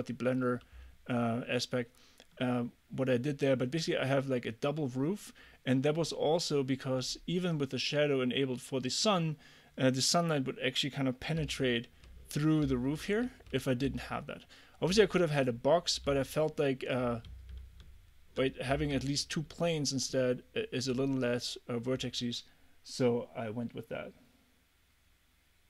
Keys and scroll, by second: 11.4 a, 12.7 w, 13.3 a, 13.9 w, 16.1 d, 17.9 w, 18.8 d.